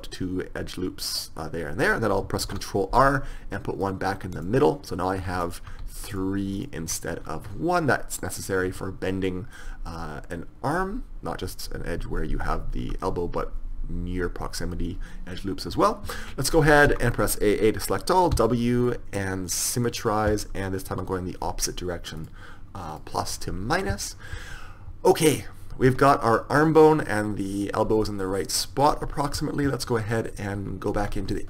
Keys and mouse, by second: 2.6 ctrl+r, 5.6-8.5 drag, 8.8 Tab, 9.7-11.6 middle drag, 12.9 KP_1, 16.3 Tab, 16.8 a, 17.0 a, 18.5 w, 22.3 click, 26.0 Tab, 26.7-28.3 right drag, 28.3-28.8 middle drag, 29.1 KP_1, 31.1 Tab.